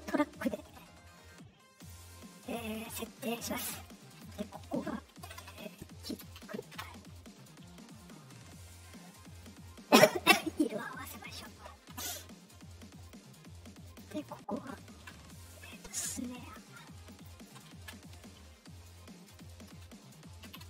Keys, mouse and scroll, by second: 1.7 click, 3.9 middle click, 3.9 scroll down 2, 6.4 k, 6.7 Return, 9.2 middle click, 9.2 scroll up 2, 10.1 click, 11.3 click, 12.9 middle click, 13.8 click, 16.4 click, 17.0 click.